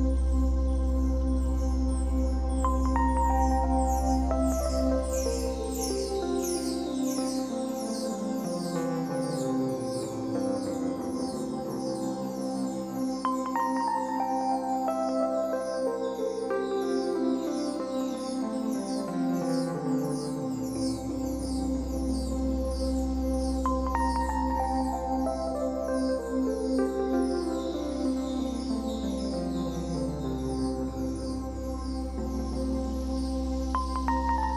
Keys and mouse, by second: 0.2 click, 7.1 click, 11.4 click, 19.6 F12, 22.1 F12, 22.9 click, 29.9 click, 32.0 click.